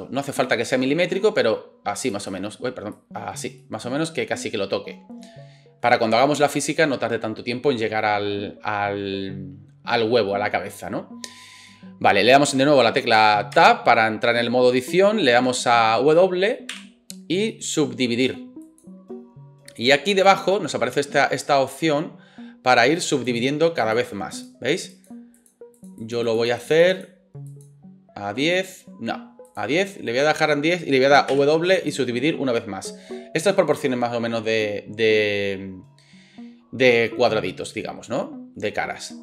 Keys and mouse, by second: 13.6 Tab, 16.7 w, 20.4-29.8 drag, 29.8-39.2 middle drag, 31.3 w.